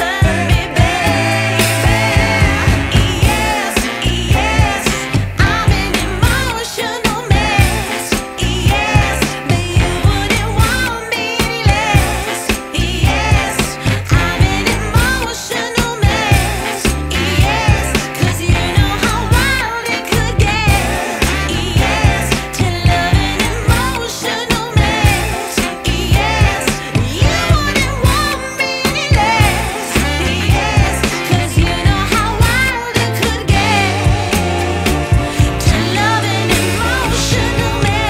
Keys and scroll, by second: 1.9 ], 3.0 ], 3.6 3, 10.5 x, 10.9 [, 13.5 0, 18.1 l, 18.4 ], 20.7 v, 22.1-25.0 typing, 30.0 x, 30.5 2, 32.6 v, 33.5 z, 34.3 v, 35.9 w.